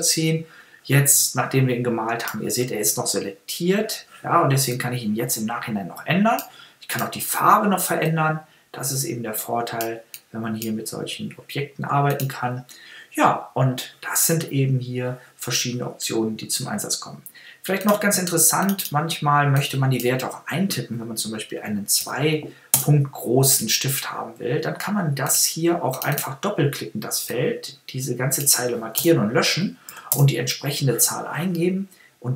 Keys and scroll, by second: 22.0 2, 22.7 Return, 29.0 BackSpace, 29.9 5, 30.1 Return.